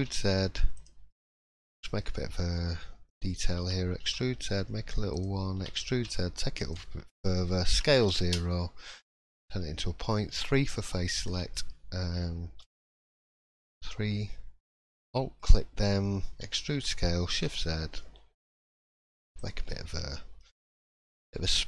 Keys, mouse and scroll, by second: 1.1 scroll up 3, 1.5 shift+middle click, 1.8 scroll up 1, 2.0 middle click, 3.5 e, 10.3 s, 10.3 2, 11.1 alt+click, 12.6 3, 14.6 alt+click, 15.0 middle click, 15.4 scroll up 2, 16.4 e, 19.3 click, 19.6-20.0 scroll down 6, 20.0 middle click, 20.5 shift+middle click, 20.9-21.3 scroll up 2, 21.3-21.6 scroll down 2.